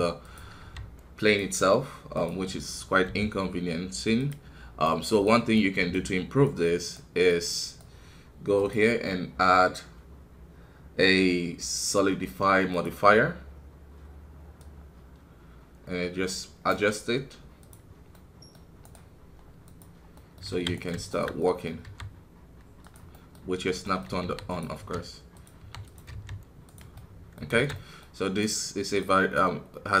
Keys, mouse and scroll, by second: 8.5-12.8 drag, 20.1 middle click, 20.5 alt+a, 20.7 right click, 21.4 middle click, 21.8 e, 23.1-24.2 middle drag, 24.2 r, 26.9 middle click, 27.5 alt+a, 27.7-30.0 middle drag.